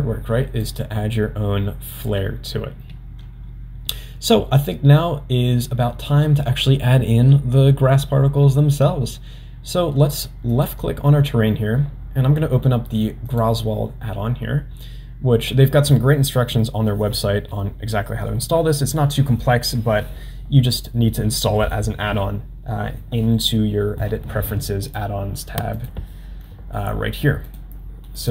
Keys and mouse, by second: 10.5 click, 13.3 click, 24.9-28.3 drag.